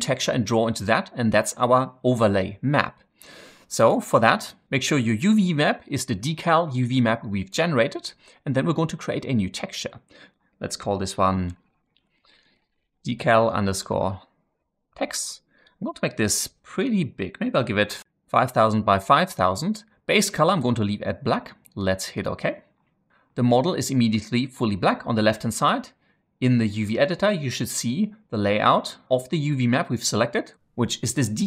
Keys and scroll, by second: 11.6-13.9 typing, 17.6-19.2 typing, 18.4 Tab.